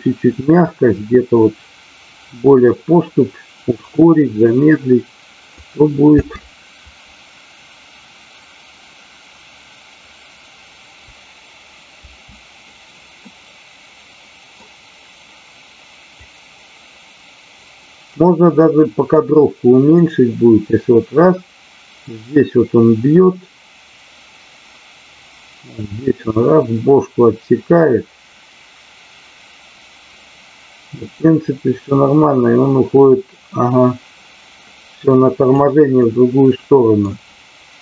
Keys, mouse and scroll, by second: 6.1 space, 11.8 space, 13.1-14.5 middle drag, 16.1-18.1 drag, 18.5 middle click, 19.9-35.6 drag, 36.0-37.0 middle drag.